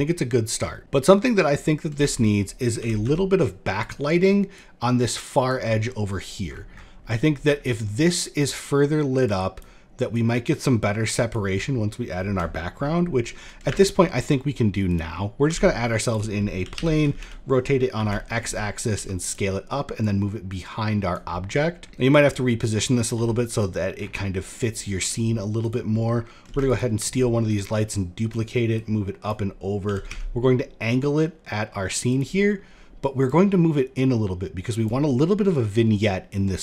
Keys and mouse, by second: 1.6 shift+d, 2.3 r, 4.0-5.1 drag, 6.9 shift+middle drag, 8.8-9.3 drag, 9.7-10.9 drag, 11.4 middle drag, 11.8 shift+middle click, 13.3 shift+a, 15.0 s, 16.1 r, 18.4 s, 19.5-20.7 drag, 20.9-21.5 middle drag, 21.7 middle click, 22.6 s, 24.0 middle click, 24.4 shift+middle drag, 25.2 click, 26.1 shift+d, 26.8 shift+click, 27.4 click, 28.2 click, 29.3 r, 32.7-34.4 drag.